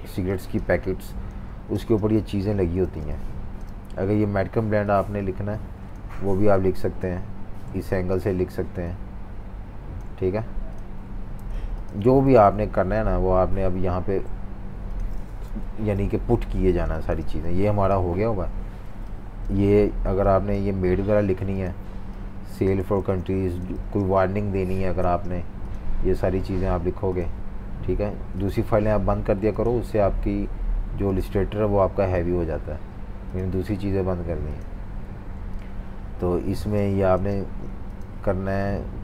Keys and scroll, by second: 1.4 typing, 3.4 space, 11.5 super+3, 11.9 super+3, 12.8 Left, 13.7 Left, 15.4 super+-, 16.6 v, 16.8 space, 18.1 Delete, 18.3 Delete, 22.8-25.0 typing, 36.5 typing.